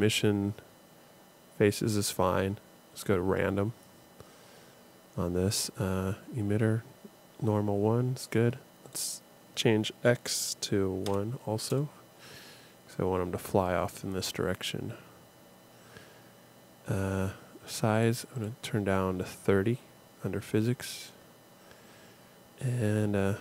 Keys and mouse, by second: 3.0-5.2 drag, 5.2-8.8 middle drag, 8.8-10.7 drag, 18.0-19.2 middle drag.